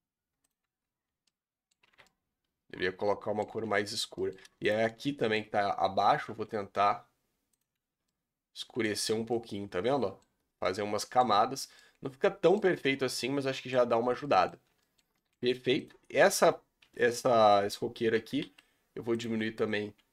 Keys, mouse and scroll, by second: 0.6 Tab, 1.1 scroll down 1, 1.2-1.8 middle drag, 1.8 alt+a, 2.0-3.4 middle drag, 3.4-4.1 scroll up 2, 4.1 middle click, 5.2-6.2 middle drag, 6.2 g, 7.7 Tab, 8.0-9.0 middle drag, 9.0 scroll down 5, 9.3-10.2 middle drag, 10.2-10.6 scroll up 5, 10.6-11.2 middle drag, 11.2 scroll up 1, 11.8-12.8 middle drag, 12.8 scroll down 4, 13.0-13.7 middle drag, 13.7-14.2 scroll up 7, 14.2 middle drag, 14.5 scroll up 2, 14.8-15.4 middle drag, 15.4-15.8 scroll up 2, 15.8 click, 16.2 scroll down 4, 16.3 Tab, 16.8 a, 18.1 a, 18.4 s, 20.0 g.